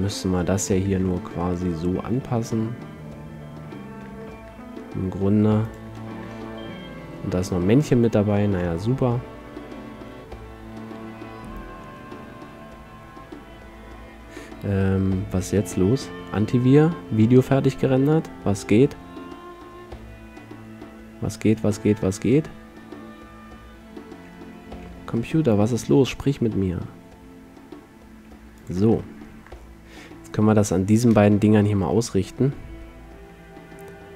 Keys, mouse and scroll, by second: 0.7-2.8 middle drag, 2.1 r, 2.8 click, 5.9-7.9 drag, 8.5-10.7 middle drag, 25.1 g, 29.1-30.6 middle drag, 31.3 shift+space, 32.9 r.